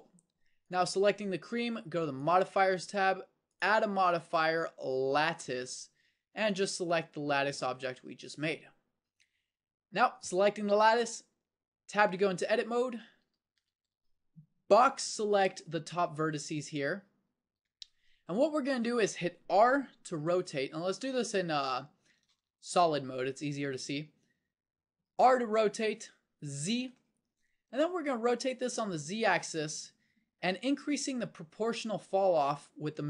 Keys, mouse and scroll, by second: 11.8 Tab, 13.2 a, 13.5 a, 14.8 b, 22.3 z, 25.1 r.